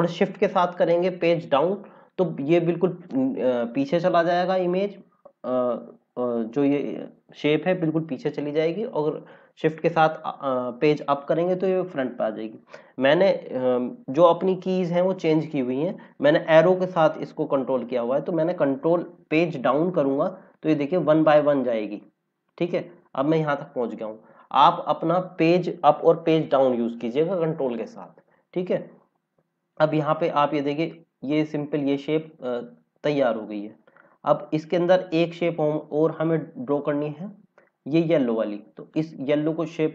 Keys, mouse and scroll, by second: 19.7 ctrl+Down, 21.0 ctrl+Down, 21.9 ctrl+Up, 24.6 click, 28.7 scroll up 1, 29.9 scroll down 1, 38.9 click.